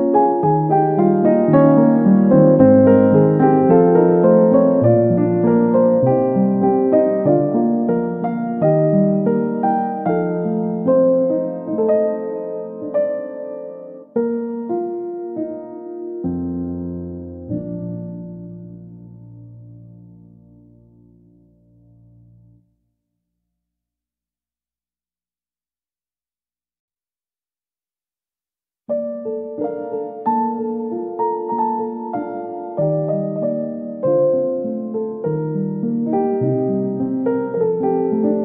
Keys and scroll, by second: 13.7 x, 33.3 x.